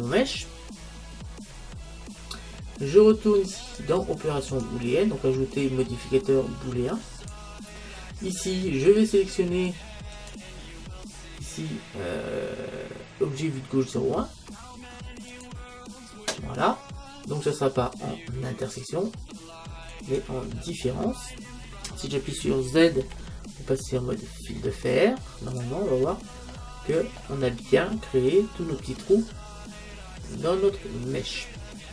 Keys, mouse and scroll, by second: 0.2 middle click, 3.7-6.5 drag, 10.2-11.9 drag, 18.8-20.5 drag, 23.0 z, 26.1-29.0 middle drag.